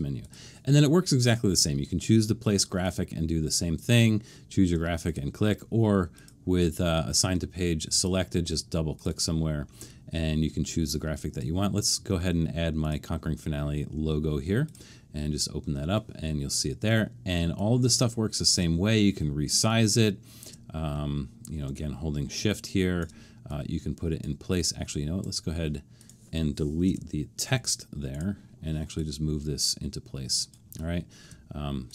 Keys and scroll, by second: 25.4 Escape, 26.9 BackSpace.